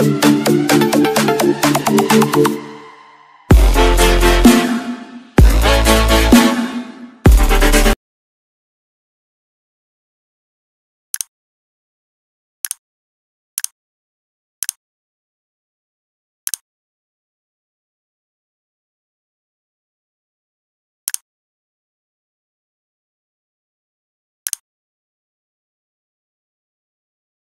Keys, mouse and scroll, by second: 3.6 Right, 5.7 Left, 6.7 Right, 7.5 click.